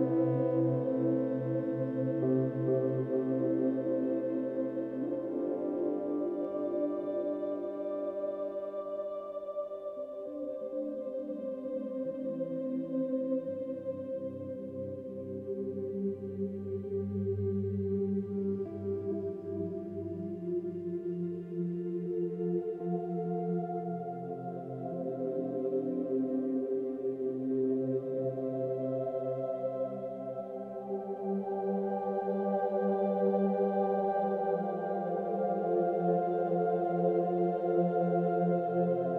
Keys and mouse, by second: 0.7-2.5 drag, 3.0-4.4 drag, 4.7-6.4 drag, 6.6 r, 6.8 x, 7.0 x, 9.7 Escape, 10.4-13.6 ctrl+alt+drag, 13.9-14.5 alt+drag, 14.7 ctrl+alt+drag, 15.6 alt+shift+drag, 16.1 alt+shift+drag, 16.6 ctrl+alt+click, 17.4 ctrl+alt+click, 17.9 ctrl+alt+click, 18.8 r, 22.3 Escape, 23.3-26.7 ctrl+alt+drag, 27.0-28.1 alt+drag, 29.7-30.6 drag, 31.5-34.0 alt+drag, 34.3-35.5 ctrl+alt+drag, 35.3 1, 36.1-37.1 ctrl+alt+drag.